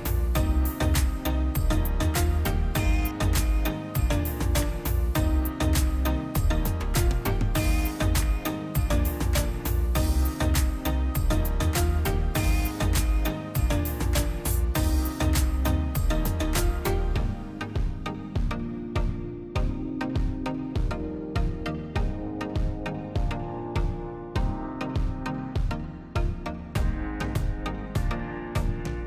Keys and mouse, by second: 1.9-2.5 middle drag, 2.5 drag, 4.2 middle click, 5.0 click, 6.1 ctrl+shift+click, 9.5 ctrl+shift+click, 12.7 drag, 18.1 click, 24.2 middle click, 24.6 click, 25.7-27.2 middle drag, 27.2 click, 27.9 shift+a, 28.7 drag.